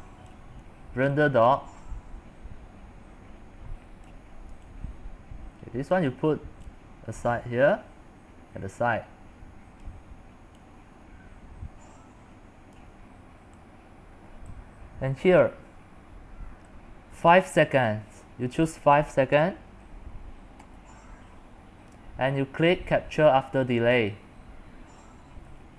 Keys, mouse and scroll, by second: 3.1-20.8 drag, 20.8 5.